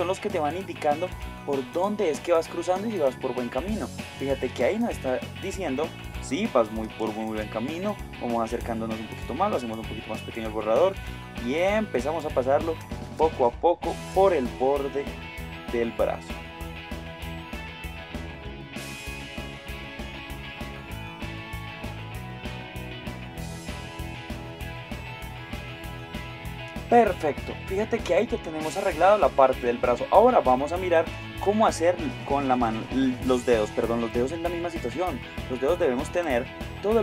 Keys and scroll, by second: 4.5 space, 6.9 space, 12.1 space, 16.9 space, 18.1 space, 19.1 space, 20.6 space, 22.4 space, 24.0 space, 26.0 space, 34.5 x, 36.3 Tab.